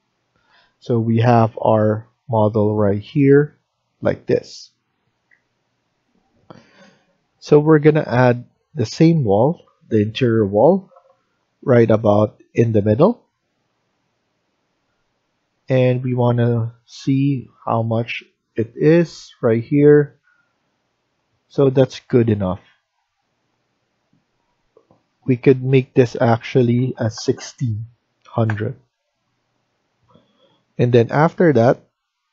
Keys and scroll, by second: 5.9 F1, 15.1 Escape, 15.6 Escape, 26.7-27.1 typing, 28.3 Return, 29.1 Escape.